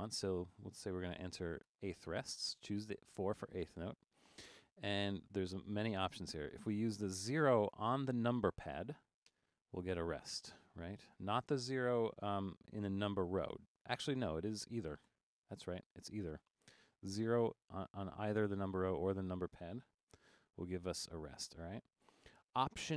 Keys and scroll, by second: 1.7 4, 9.4 0, 15.1 0, 18.4 Right, 20.1 0.